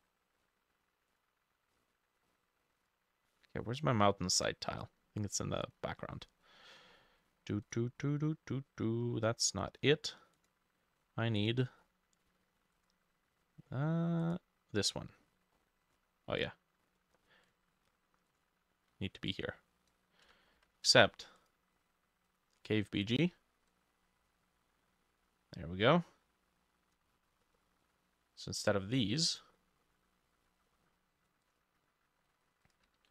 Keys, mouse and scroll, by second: 1.8-2.9 scroll up 10, 7.0-9.4 drag, 7.0-7.7 scroll down 3, 11.0-11.8 scroll down 6, 11.8 scroll down 4, 13.7-14.1 scroll down 1, 15.6 scroll down 5, 20.6 ctrl+z, 27.2-27.5 scroll down 1, 27.5 middle click, 29.6 middle click, 30.5 middle click.